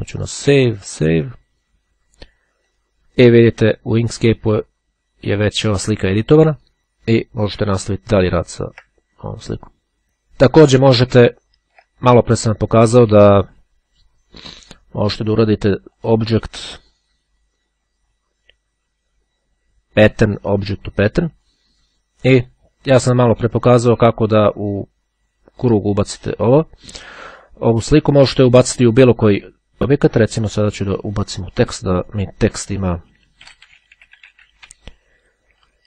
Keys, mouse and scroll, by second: 1.0 click, 2.7 click, 8.0-8.5 ctrl+scroll up 2, 9.0-9.7 ctrl+scroll up 1, 11.3-11.9 ctrl+scroll down 2, 12.1 ctrl+click, 15.9 click, 20.6-22.1 drag, 30.2 click, 31.7 click, 32.5-35.2 typing.